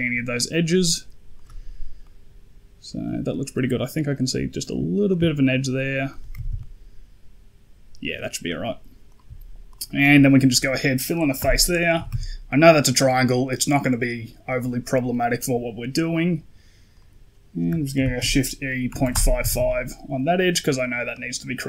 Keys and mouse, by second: 1.9 middle click, 5.0 shift+click, 6.2 a, 6.3 a, 6.4-8.0 middle drag, 8.9 right click, 9.6 shift+right click, 9.8 shift+click, 11.3 f, 11.6 click, 11.8 a, 12.0 a, 16.8 right click, 17.8 shift+e, 19.3 a, 19.4 a, 21.0 middle click.